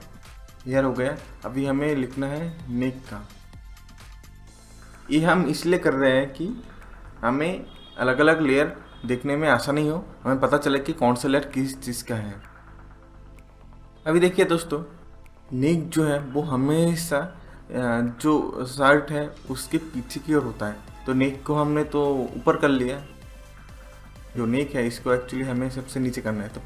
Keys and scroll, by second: 6.0-7.6 typing.